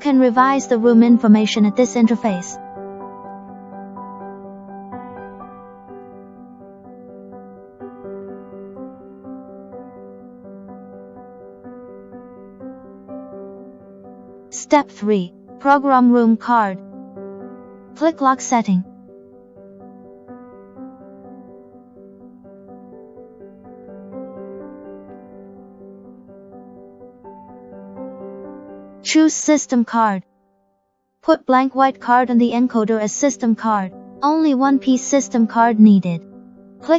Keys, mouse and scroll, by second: 0.1 click, 3.5 click, 3.6 click, 8.4 click, 9.4 click, 11.3 click, 13.8 click, 20.2 click, 27.0 click, 31.3 click, 36.4 click.